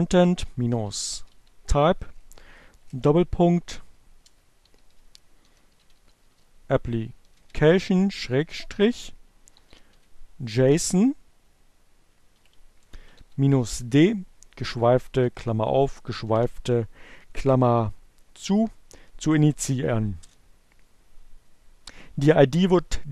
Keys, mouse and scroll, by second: 0.0-1.5 typing, 3.3-6.5 typing, 7.6-9.2 typing, 10.9 shift+2, 11.0 shift+space, 12.1-13.2 typing, 13.5 alt+7, 15.6 alt+0, 18.5 Return.